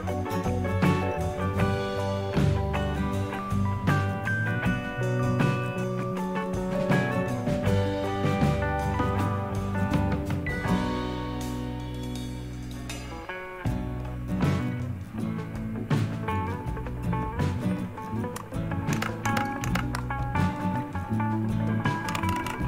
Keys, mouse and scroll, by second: 0.0 click, 1.4 click, 2.8 click, 5.6 click, 7.1 click, 9.8 click, 12.7 click, 13.3 click, 14.5 click, 18.9 ctrl++, 19.2 ctrl++, 19.6 ctrl++, 21.8-22.6 typing.